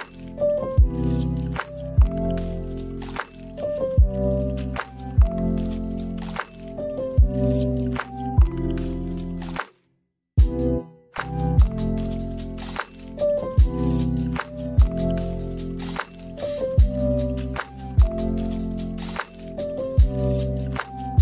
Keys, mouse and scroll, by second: 0.1 click, 5.1 click, 6.0-6.5 scroll up 2, 6.5 middle click, 9.6 shift+a, 15.9 click, 16.3 click, 17.0 click, 18.0 click, 20.7 click.